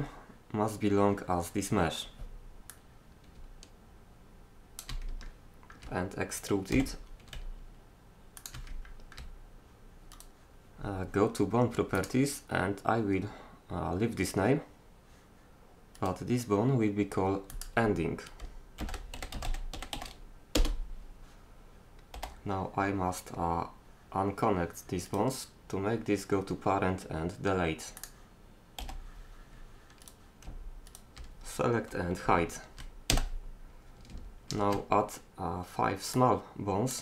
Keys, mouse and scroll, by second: 2.7-4.5 drag, 6.7 e, 12.0 middle click, 12.2-13.7 drag, 16.0-17.5 right drag, 17.5 middle click, 17.8-19.4 drag, 22.2 g, 28.0-30.9 drag, 28.8 g, 30.9-32.7 right drag, 33.1 h, 34.5 shift+a.